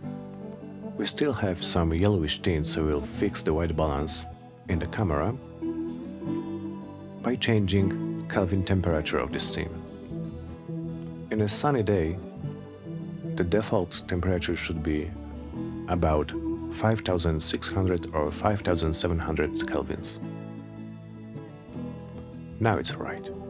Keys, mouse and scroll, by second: 0.3 click, 14.0 click, 15.6-17.5 typing, 17.9 Return.